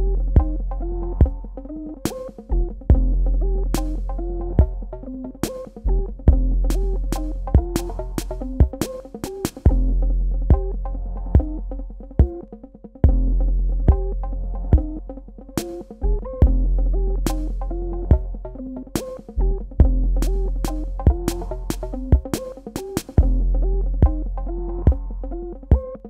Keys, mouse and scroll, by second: 1.2 ctrl+click, 3.4 Tab, 4.4 click, 4.9 shift+click, 6.0 right click, 7.3 click, 10.6 super+Num_Lock, 10.8 KP_Add, 13.5 super+KP_Subtract, 14.6 click, 14.8 Tab, 15.5 space, 15.9 click, 16.2 space, 18.1 click, 19.0 super+KP_Add, 21.0 super+KP_Subtract, 22.9 click, 25.3 KP_1, 25.5 KP_0.